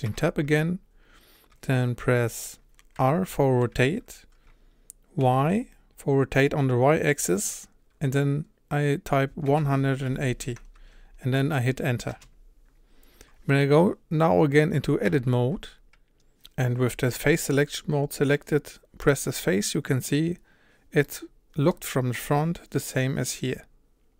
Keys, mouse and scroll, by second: 0.1 Tab, 3.0 r, 15.1 Tab, 19.1 click, 21.0-24.1 middle drag.